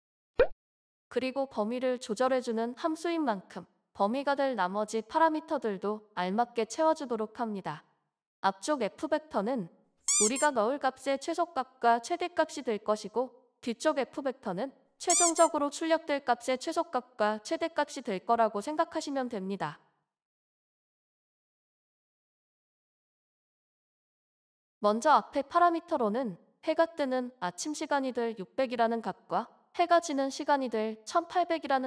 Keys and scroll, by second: 19.9 BackSpace, 23.9 BackSpace, 30.5 BackSpace.